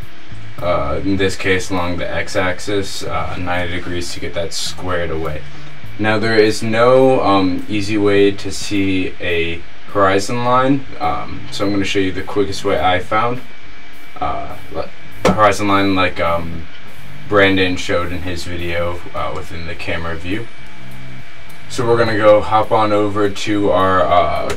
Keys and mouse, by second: 1.0 r, 20.0 KP_0, 20.6 ctrl+right click.